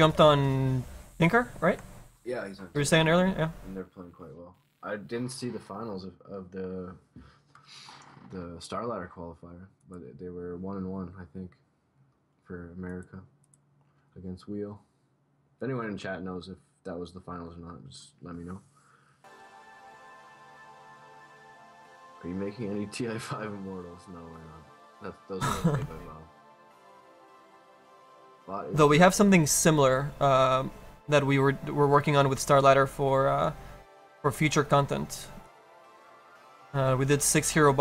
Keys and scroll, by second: 6.9 ctrl+z, 7.6 ctrl+z, 9.3 ctrl+z, 10.6 ctrl+z.